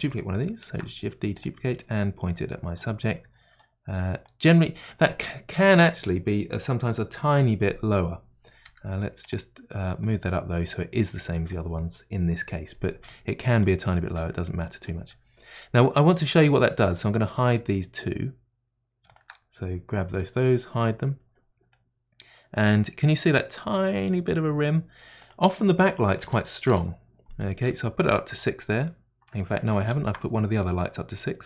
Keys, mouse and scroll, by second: 0.7 shift+d, 2.0-3.0 drag, 3.0-4.2 middle drag, 4.2-8.7 drag, 8.6 g, 10.0-15.1 drag, 15.1-16.8 middle drag, 16.8 click, 19.0 shift+click, 20.1 h, 21.7-24.7 middle drag, 25.2-30.4 drag, 28.0-30.4 middle drag, 30.4 ctrl+z.